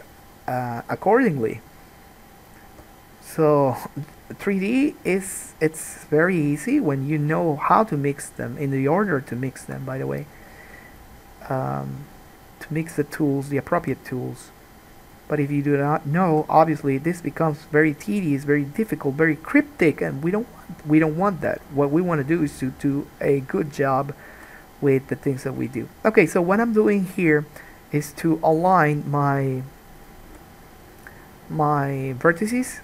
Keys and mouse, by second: 2.6 click, 2.9-7.4 middle drag, 2.9 g, 7.4 click, 7.5-13.1 middle drag, 13.1 click, 13.2-15.9 middle drag, 14.0 g, 15.9 click, 16.0-27.2 middle drag, 16.5 g, 20.0 g, 24.5 g, 27.2 click, 27.6 middle click, 28.8 g, 30.1 click, 30.5 g, 32.5 click, 32.7 g.